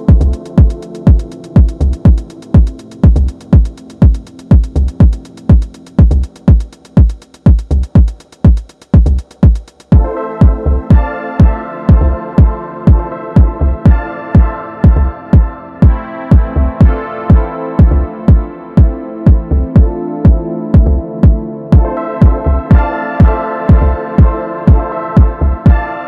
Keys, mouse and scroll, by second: 1.0 click, 3.1-5.7 middle drag, 5.7 click, 6.4 ctrl+shift+click, 8.3 ctrl+shift+click, 9.6 ctrl+click, 13.7-16.4 middle drag, 16.4 alt+e.